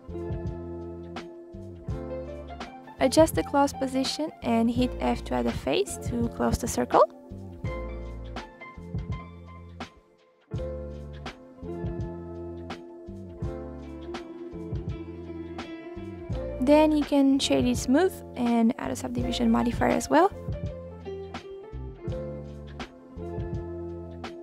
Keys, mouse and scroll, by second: 1.3 a, 1.4 click, 2.1 middle click, 3.0 r, 4.1-5.9 middle drag, 5.9 alt+click, 6.1-6.4 scroll up 6, 6.4 alt+click, 6.9-7.3 scroll down 1, 7.3-8.1 scroll up 9, 8.1 click, 8.6 alt+click, 9.5 f, 10.3 i, 11.3 click, 12.0 click, 12.6 middle click, 13.4 click, 15.1 click, 15.6-16.2 scroll down 11, 16.2-17.2 right drag, 17.2 scroll up 1, 17.4-18.2 middle drag, 18.2-20.6 drag, 21.8 click, 22.5-23.1 drag, 23.1 scroll up 3, 23.4 middle click, 23.9-24.3 scroll up 1, 24.3-24.4 scroll down 10.